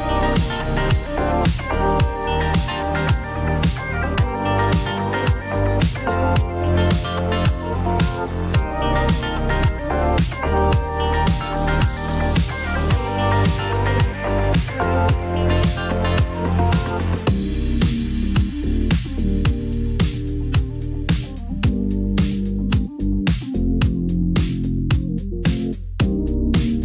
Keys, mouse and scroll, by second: 0.0-1.7 typing, 2.2 Return, 5.4 click, 5.9 click, 6.9-8.9 typing, 10.1 click, 10.2 click, 12.4 click, 13.0 click, 15.8 click, 17.8 click, 19.5 click, 21.6-24.2 typing, 23.4 click, 25.7 click, 26.1-26.8 typing.